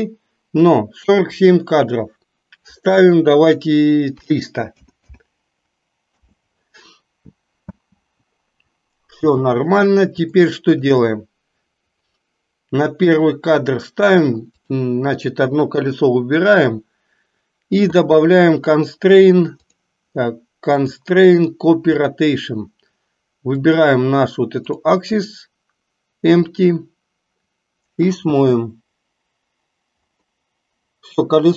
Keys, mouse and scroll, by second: 1.4-6.3 drag, 5.0 KP_0, 7.8 space, 9.4 space, 10.6 shift+middle click, 13.3 drag, 14.6 click, 19.6 click, 20.9-22.3 drag, 23.8 click, 28.4 space.